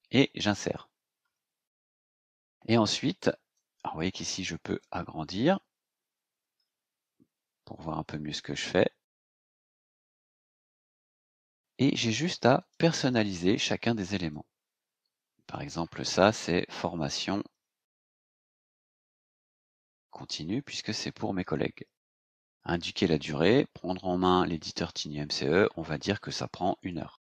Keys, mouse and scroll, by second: 0.4 click, 1.6-1.9 scroll down 2, 2.3 scroll up 2, 3.5-5.0 drag, 5.4-5.8 scroll down 2, 6.4 scroll down 2, 8.0-9.5 drag, 9.7-10.1 scroll up 2, 12.6 click, 13.1 click, 14.3-15.7 drag, 16.5-21.5 typing, 23.0-24.7 drag, 26.8 KP_1.